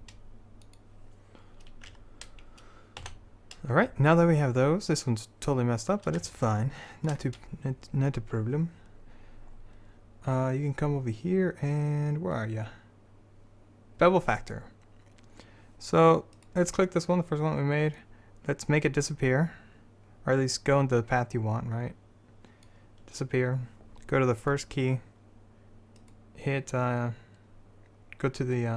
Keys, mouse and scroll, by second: 2.0 Tab, 3.2 z, 6.9-8.1 middle drag, 16.5-18.1 right drag, 18.5-20.1 drag, 24.5-28.0 drag, 26.1 right click.